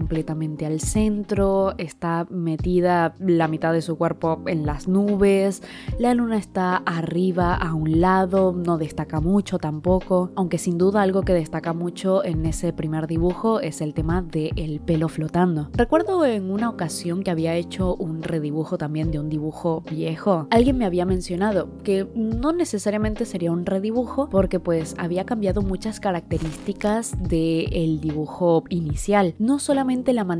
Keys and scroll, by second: 0.0-1.1 typing, 2.5 i, 2.7 i, 3.7 ctrl+z, 4.0-10.9 typing, 4.3 ctrl+z, 9.7 ctrl+z, 10.3 ctrl+z, 10.6 ctrl+z, 10.7 ctrl+z, 11.2 ctrl+z, 11.4 ctrl+z, 11.5 ctrl+z, 11.7 ctrl+z, 12.1 ctrl+z, 12.3 ctrl+z, 12.4-13.7 typing, 12.8 ctrl+z, 12.9 ctrl+z, 13.1 ctrl+z, 13.8 ctrl+z, 14.8-17.4 typing, 15.3 ctrl+z, 18.6 i.